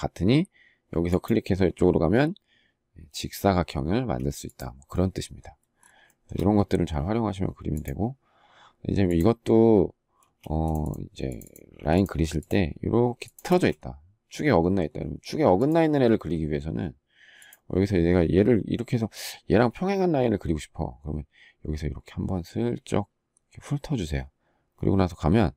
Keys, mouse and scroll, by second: 3.6 space, 5.8 shift+middle click, 10.0 space, 13.2 space.